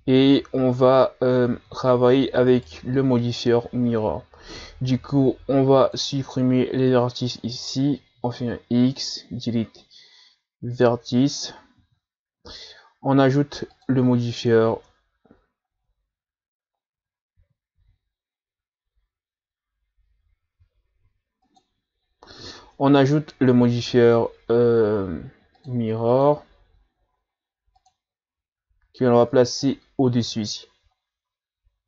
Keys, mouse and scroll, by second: 1.6 z, 2.5 right click, 3.0 b, 8.3 x, 11.8 z, 13.7 click, 14.7 Tab, 15.7 Tab, 17.0 ctrl+z, 17.4 ctrl+z, 17.8 ctrl+z, 20.6 x, 22.6 Tab, 25.6-29.1 drag, 29.2 click, 31.0 scroll up 3.